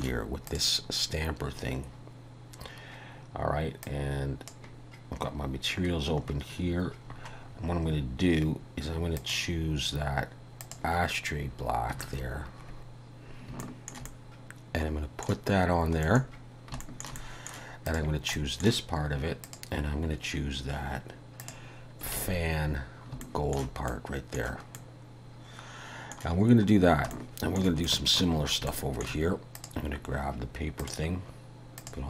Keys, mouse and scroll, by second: 0.5 click, 3.9 click, 5.3-9.0 scroll up 34, 9.2 click, 11.5-12.1 scroll up 2, 12.8 scroll up 2, 12.8 n, 13.6 shift+middle click, 14.1 middle click, 15.8 scroll down 1, 16.1 middle click, 16.4-16.8 scroll down 3, 16.9 shift+middle click, 17.2 middle click, 17.9 click, 18.4 middle click, 19.5 click, 22.2 alt+a, 22.7 scroll down 3, 23.2 shift+middle click, 24.8 middle click, 26.8 scroll down 1, 27.2 shift+middle click, 27.9 middle click, 28.4-28.7 scroll up 2, 28.7 shift+middle click, 29.6 click, 30.8 click.